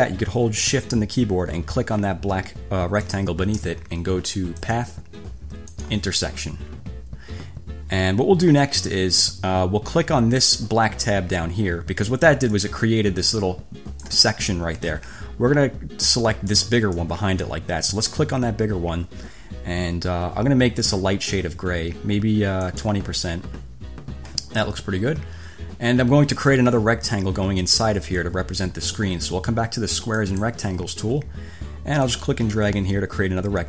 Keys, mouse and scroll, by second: 3.3 shift+click, 4.8 click, 6.0 click, 12.7-14.5 drag, 15.1 ctrl+z, 16.7 click, 17.2 click, 18.0 ctrl+z, 22.8 click, 30.3 click, 32.2-33.6 drag.